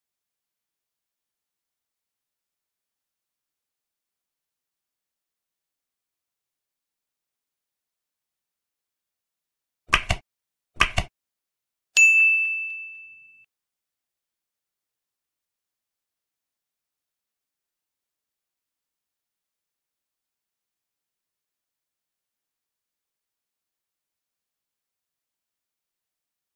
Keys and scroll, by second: 0.4 ctrl+BackSpace, 1.0 Down, 5.4 space, 5.5 space, 7.4 ctrl+s, 7.7 Down, 13.6 ctrl+Down, 14.4 End, 14.6 ctrl+c, 14.7 ctrl+Tab, 15.3 ctrl+v, 16.1 ctrl+z, 16.5 ctrl+Left, 17.3 Right, 17.4 ctrl+v, 17.7 ctrl+s, 19.5 ctrl+s, 24.1 Home, 24.7 Home, 24.9 ctrl+shift+Right.